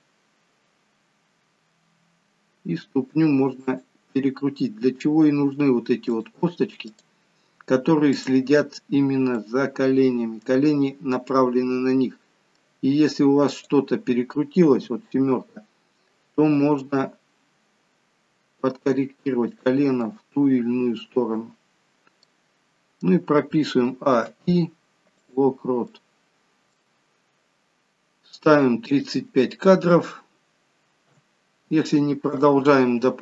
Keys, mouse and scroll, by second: 1.8 r, 4.6-6.1 scroll up 3, 6.1 click, 6.8 click, 9.3 middle click, 10.8 scroll down 2, 11.3 middle click, 13.4 click, 14.7 KP_7, 16.8 r, 20.0 middle click, 21.7-22.2 scroll down 3, 22.2 middle click, 23.8 a, 24.1 i, 25.9 middle click, 29.0 click.